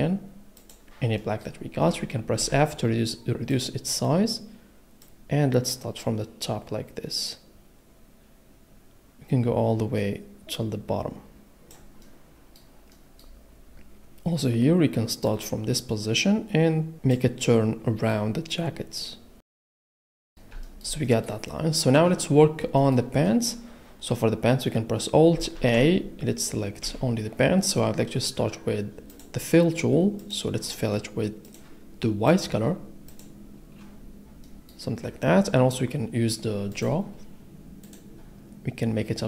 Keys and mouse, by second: 0.6 click, 2.4 f, 3.5 click, 14.3 middle click, 16.5 middle click, 17.7 click, 20.1 middle click, 21.1 middle click, 25.5 alt+a, 26.8 l, 29.1 click, 32.3 click, 33.1 click, 36.7 click, 37.8 click.